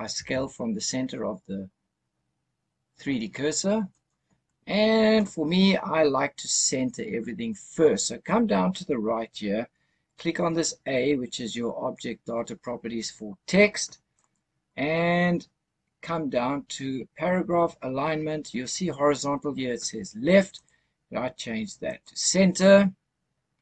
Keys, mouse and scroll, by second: 0.0 s, 3.8 right click, 14.0 click, 16.4-17.1 scroll down 2, 20.4-22.0 drag.